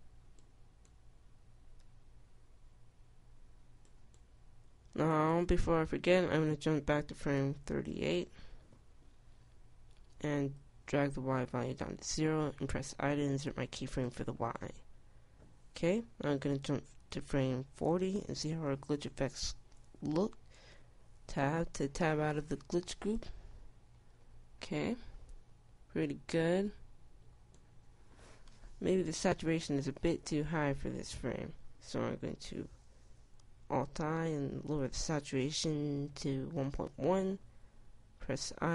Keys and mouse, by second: 0.2 i, 2.9 i, 9.2 middle click, 11.2-12.8 drag, 12.8 i, 19.4-21.9 drag, 21.9 Tab, 30.5 Tab, 34.9 alt+i.